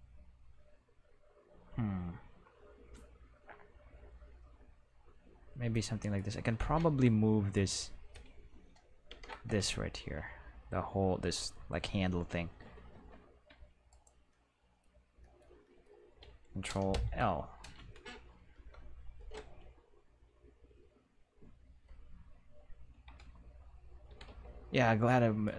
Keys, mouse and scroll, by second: 5.7 click, 6.1 right click, 6.7 Tab, 7.5 right click, 9.0 ctrl+i, 12.9 Tab, 13.4 Tab, 13.8 right click, 14.2 middle click, 15.6 middle click, 16.9 ctrl+l, 18.5 Home, 24.0 g, 24.2 x, 25.4 right click.